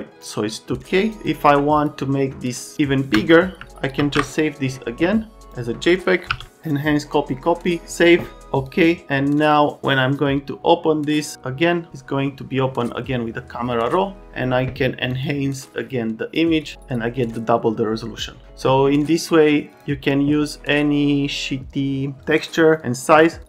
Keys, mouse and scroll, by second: 1.0 click, 1.2 ctrl+alt+space, 1.2 ctrl+alt+click, 1.4 ctrl+alt+click, 1.8 ctrl+alt+click, 3.9 ctrl+alt+s, 8.5 click, 9.4 click, 9.8 click, 16.6 click, 19.7 click, 22.2 space, 22.2-23.4 ctrl+scroll up 4.